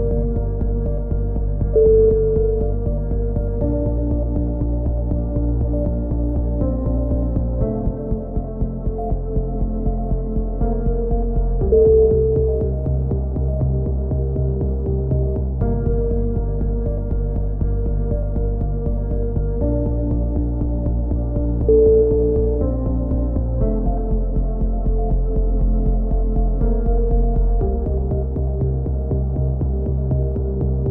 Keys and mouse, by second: 0.2 KP_7, 1.8 click, 2.7-4.5 drag, 3.4 a, 3.4 z, 4.2 right click, 4.5 ctrl+l, 4.6 ctrl+n, 4.9 a, 5.0 click, 5.7 KP_3, 5.8 z, 7.3 right click, 7.9 right click, 8.4 f, 8.6 a, 9.5 ctrl+r, 9.7-11.2 right drag, 11.2 a, 11.5 ctrl+r, 12.0 click, 12.2 g, 12.9-14.7 right drag, 13.6 f, 14.5 f, 14.6 a, 15.1 ctrl+r, 15.6 right click, 15.8 click, 16.5 a, 16.8 right click, 17.0 click, 17.4 a, 17.5 click, 18.3-19.5 ctrl+z, 19.5 ctrl+r, 20.0 click, 20.5 right click, 21.6 a, 22.8-25.6 drag, 25.6 KP_3, 25.7 z, 26.2 right click, 26.8 KP_7, 29.6 KP_2, 29.9 KP_3, 30.3 e, 30.6-30.9 drag.